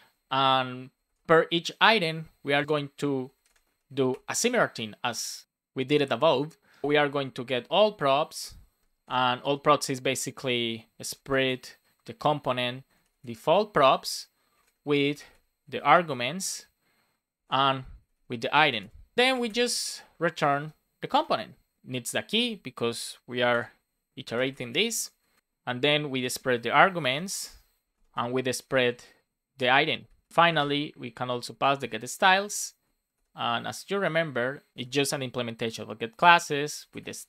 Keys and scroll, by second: 0.1 shift+9, 2.5 space, 3.4 shift+space, 3.6 shift+[, 4.0 Return, 5.0 Return, 7.1 space, 8.8 space, 9.3 shift+p, 10.3 BackSpace, 10.5 shift+[, 12.0 Return, 13.7 Return, 14.5 space, 16.3 Return, 17.3 space, 19.1 Return, 21.0-23.4 typing, 25.1 Right, 25.4 space, 26.1 shift+[, 27.8-30.3 typing, 31.2 Down, 31.7 Return, 33.0 shift+[, 35.6 Return, 36.1 shift+9.